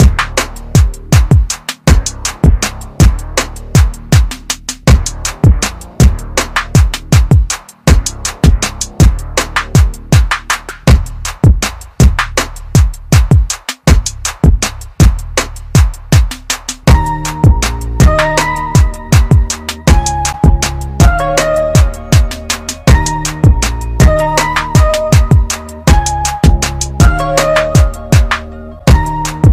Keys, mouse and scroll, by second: 5.6 click, 5.6 typing, 9.7 click, 14.3 click, 14.3 typing, 24.0 click, 29.0 click.